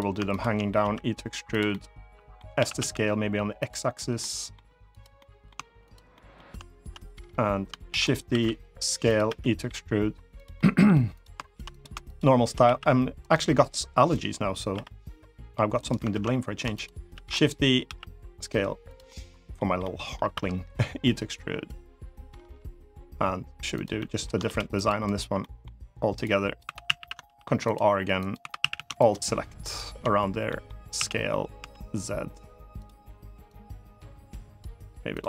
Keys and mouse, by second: 0.0 shift+click, 0.5 e, 1.4 middle click, 2.3 s, 2.5 x, 3.3 click, 3.9 middle click, 4.9 middle click, 5.8 shift+middle click, 7.6 shift+d, 7.8 right click, 8.0 s, 8.8 click, 9.0 e, 10.1 click, 10.3 middle click, 11.5 click, 11.8 shift+click, 12.3 s, 12.9 click, 14.5 i, 15.5 click, 15.8 ctrl+z, 16.4 shift+click, 16.8 shift+d, 17.1 click, 17.6 s, 18.6 click, 18.8 middle click, 19.5 middle click, 20.0 e, 23.4 click, 23.7 middle click, 24.2 ctrl+r, 24.8 right click, 25.1 middle click, 26.0 click, 26.4 3, 26.6 a, 27.0 ctrl+r, 27.9 click, 28.3 a, 28.3 3, 28.5 a, 28.7 alt+shift+click, 29.4 alt+shift+click, 30.2 middle click, 30.7 s, 31.3 z, 32.5 click, 33.2-34.3 drag, 34.9 click.